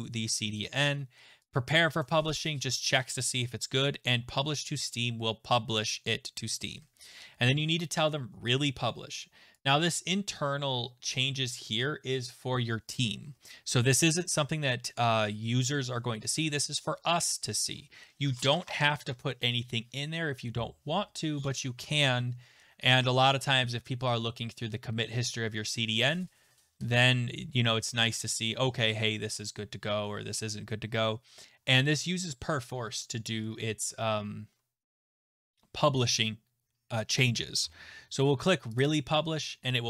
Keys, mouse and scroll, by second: 2.7 click, 9.6 click, 38.8 click.